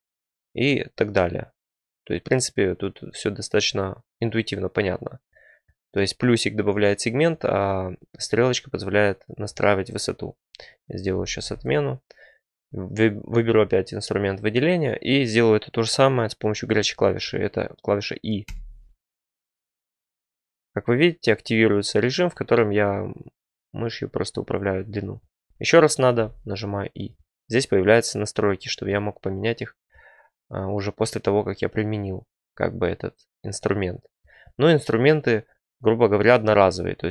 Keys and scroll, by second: 11.1 ctrl+z, 11.4 ctrl+z, 17.2 ctrl+z, 18.4 e, 26.1 e.